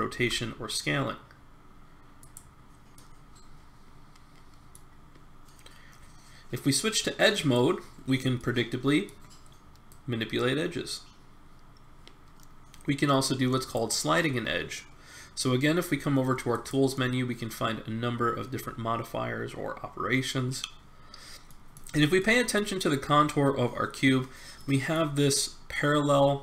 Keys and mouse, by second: 2.9-4.8 middle drag, 7.3-8.5 drag, 8.5 middle click, 9.9 middle click, 11.0 click, 16.5 click, 21.4-24.0 middle drag, 24.6-26.4 middle drag.